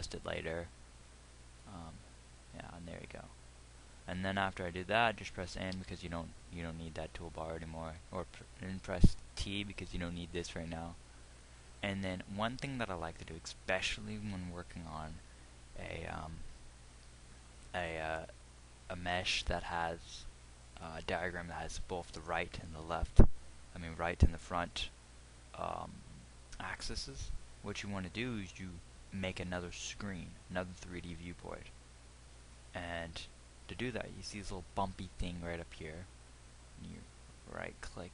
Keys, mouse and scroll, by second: 6.4 n, 10.1 t.